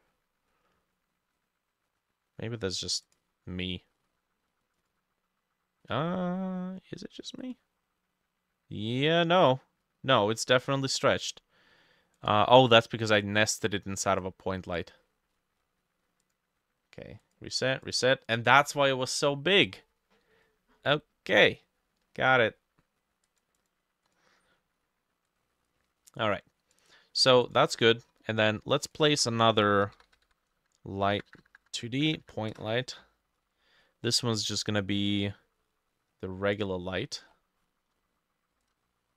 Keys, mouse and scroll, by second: 23.6-29.0 drag, 29.1 ctrl+a, 29.6-30.8 typing, 31.2 Up, 31.3 Up, 31.5 Up, 31.6 Up, 31.7 Up, 31.8 Up, 31.9 Up, 32.0 Up, 32.3 Up, 32.6 Return, 37.3-38.6 scroll down 6, 38.7 alt+click.